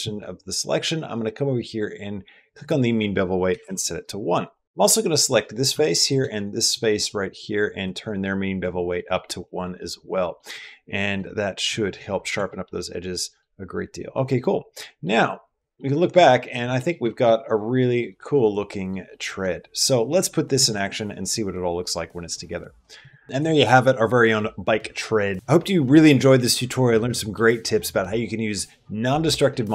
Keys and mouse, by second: 2.4-3.6 drag, 4.4 middle click, 4.6 ctrl+z, 4.6 typing, 4.9 click, 5.3 middle click, 6.2 middle click, 7.7 click, 8.9 middle click, 9.6 click, 10.1 middle click, 10.5 middle click, 12.0 middle click, 12.1 Tab, 12.6 middle click, 13.0 middle click, 14.6 middle click, 15.7 middle click, 16.1 shift+middle click, 16.6 middle click, 17.0 shift+middle click, 17.6 middle click, 17.9 right click, 18.3-19.6 typing, 18.6 middle click, 19.0 middle click, 19.8 middle click, 22.8 click.